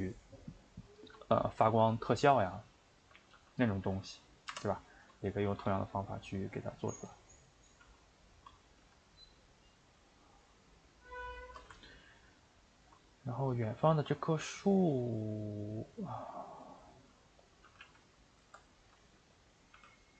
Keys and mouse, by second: 1.5 a, 1.7 a, 2.3 click, 2.6 shift+click, 3.3 g, 6.2-6.8 middle drag, 6.8 click, 7.1 click, 7.3 middle click, 7.8 s, 10.2-11.4 middle drag, 11.4-11.7 shift+right drag, 11.7-13.4 ctrl+middle drag, 13.4 click, 13.7 shift+click, 14.0 middle click, 14.4 g, 16.9 middle click, 17.5 click, 17.6 g, 18.7 middle click, 19.4 click, 19.7 g.